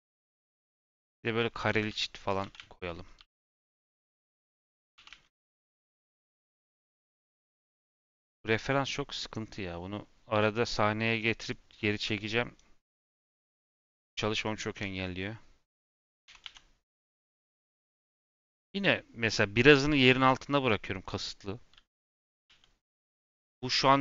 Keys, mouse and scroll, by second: 1.6 g, 2.3 click, 2.3 g, 4.0 x, 4.6 click, 4.9 g, 13.0 middle click, 13.4-13.8 scroll up 1, 13.8 shift+middle click, 14.7 s, 16.2 s.